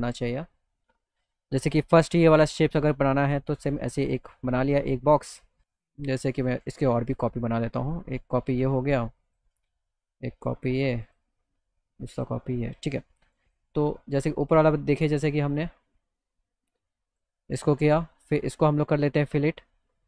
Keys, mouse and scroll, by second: 0.7 middle click, 3.2-5.2 drag, 6.4 click, 7.8-9.4 shift+drag, 11.1 click, 12.2 click, 13.4 click, 14.2 click, 16.6 click, 17.1 click.